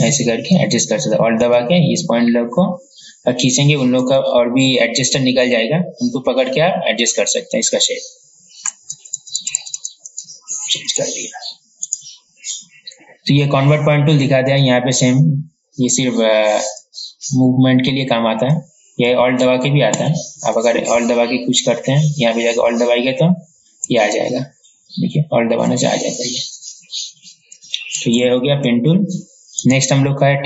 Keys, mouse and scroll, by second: 1.8-4.5 alt+drag, 9.1 ctrl+z, 9.4 ctrl+z, 9.5 ctrl+z, 9.7 ctrl+z, 9.9 ctrl+z, 10.4 ctrl+z, 10.9 ctrl+z, 12.0 right click, 14.7-19.3 drag, 19.7 ctrl+z, 20.1 ctrl+z, 26.3-27.5 drag, 28.3 ctrl+z, 29.8 right click.